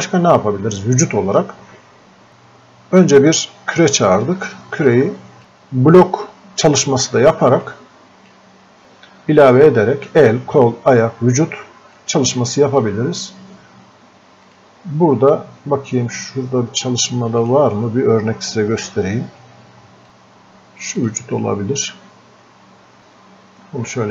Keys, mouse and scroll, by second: 4.9-8.8 drag, 12.0-14.5 drag, 17.5 click, 20.9-24.1 drag.